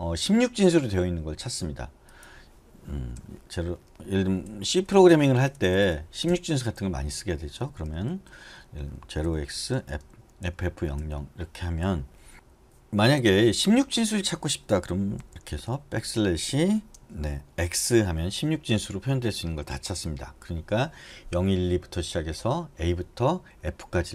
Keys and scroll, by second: 3.7 k, 4.9-12.3 typing, 15.4-16.2 typing, 17.9 x.